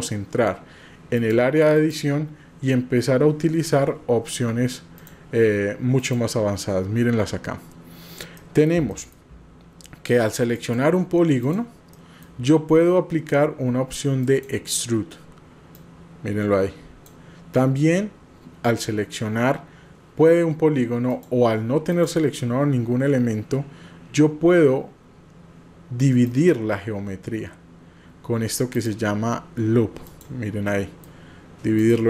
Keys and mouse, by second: 1.1-1.9 drag, 5.1-6.2 drag, 8.3 middle click, 9.1 shift+middle click, 10.5 click, 11.4 click, 12.0 middle click, 14.2 click, 15.8-17.2 drag, 21.1 click, 21.9 click, 26.2 click, 28.7 click, 30.1 click, 30.8 middle click, 31.8 click.